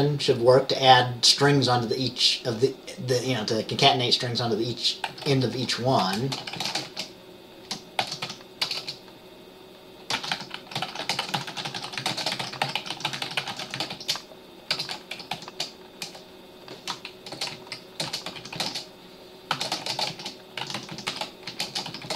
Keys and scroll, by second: 5.2-7.0 typing, 8.1-8.9 typing, 10.3-15.4 typing, 16.6-22.1 typing.